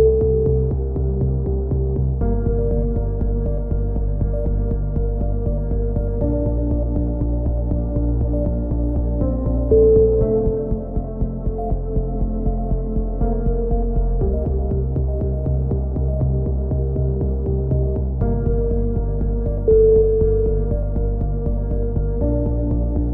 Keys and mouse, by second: 5.2-6.5 drag, 6.5-9.4 right drag, 9.0 KP_7, 9.5 KP_1, 10.0 z, 10.8 s, 13.2 a, 13.4 z, 13.6-15.6 drag, 14.0 Tab, 18.0-19.2 drag, 18.2 KP_3, 19.3 z, 19.7 z, 20.0 Tab, 20.4 click, 20.7 click.